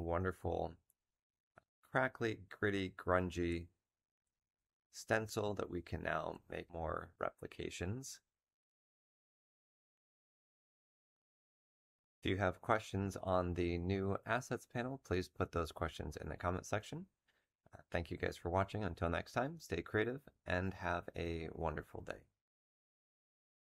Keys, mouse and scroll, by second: 3.4 z, 5.1 space, 5.3 click.